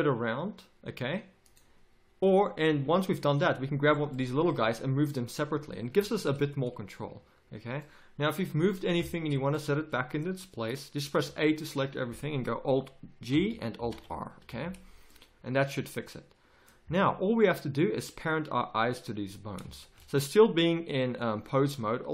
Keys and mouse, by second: 2.7 g, 4.6 g, 6.9 a, 11.1 a, 13.3 alt+g, 13.8 alt+r, 14.4 a.